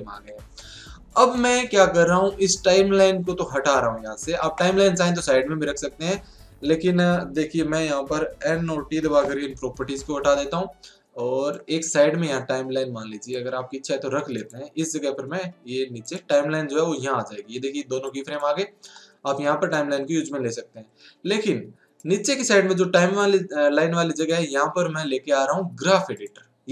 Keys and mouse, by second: 1.0-3.1 middle drag, 5.8-8.4 middle drag, 8.4 n, 11.8-13.3 drag, 18.0-24.8 drag, 25.2-26.7 drag.